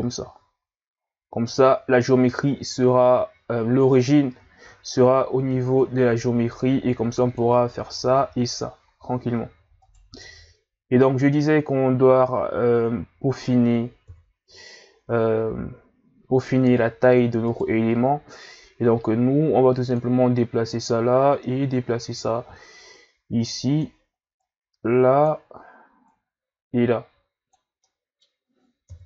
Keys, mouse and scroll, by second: 4.4 Tab, 5.8 click, 7.8 s, 10.2-13.3 middle drag, 14.1 KP_3, 16.2 s, 18.3-24.3 drag, 26.1 click, 27.8-28.9 middle drag, 28.9 KP_1.